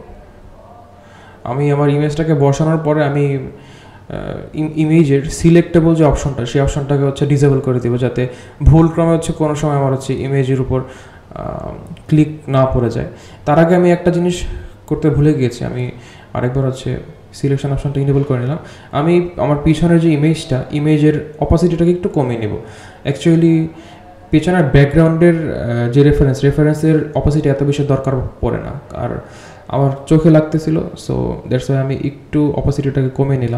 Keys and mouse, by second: 2.2 click, 4.2 click, 5.2 click, 7.2 g, 10.4 click, 11.5 click, 12.4 drag, 12.9 click, 17.7 click, 18.1-27.3 drag, 27.9 click, 28.5 click, 30.2 click.